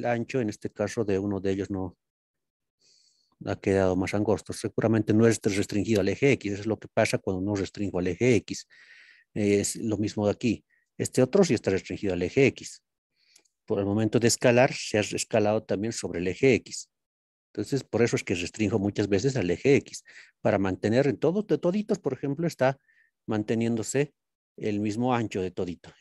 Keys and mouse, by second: 0.7-5.3 middle drag, 9.2-10.4 drag, 10.4-11.0 middle drag, 13.7-14.6 middle drag, 16.2-16.7 middle drag, 18.8-20.1 shift+middle drag, 21.2-21.6 middle drag, 22.2-22.5 middle drag, 24.2 click, 25.0 shift+middle click.